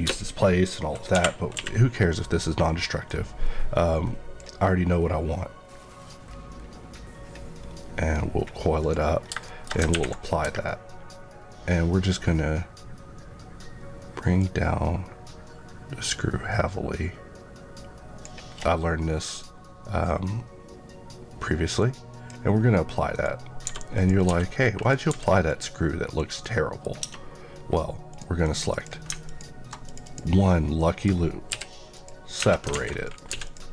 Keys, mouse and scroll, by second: 1.1 Escape, 1.5 q, 3.0 click, 7.5 scroll up 1, 8.7 click, 9.1 scroll down 1, 9.4 middle click, 14.3 click, 21.7 click, 23.0 right click, 23.6 g, 23.9 click, 24.7 click, 25.0 g, 25.4 click, 26.0 KP_Decimal, 26.3 middle click, 27.0 Tab, 27.5 scroll up 1, 28.3 click, 29.2 alt+click, 29.6 click, 30.7 middle click, 31.4 p, 31.9 click, 32.3 Tab, 32.6 alt+a, 33.0 click, 33.2 x, 33.4 click.